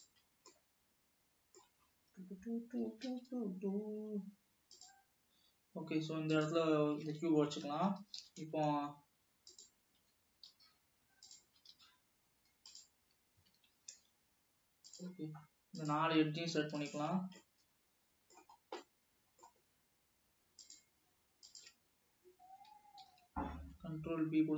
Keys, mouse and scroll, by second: 0.4 scroll down 2, 0.6-1.9 middle drag, 1.9-2.8 scroll up 4, 3.1 g, 6.3 click, 7.3 alt+a, 7.9 l, 8.3 s, 10.2 s, 11.6 s, 13.6 alt+a, 15.1-16.2 drag, 16.9 shift+click, 17.4-18.7 middle drag, 18.7-19.1 scroll down 2, 19.1-21.1 middle drag, 21.6-22.3 shift+drag, 23.3 ctrl+b.